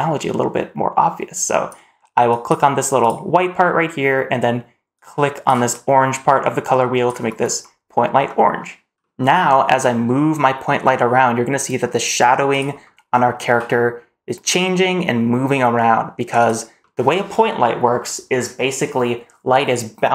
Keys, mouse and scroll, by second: 2.9 click, 7.5-8.1 scroll down 1, 8.1 middle click, 8.9 middle drag, 8.9 scroll down 1, 9.5 g, 12.7-13.1 middle drag, 13.3 g, 16.7 click, 16.7 middle click.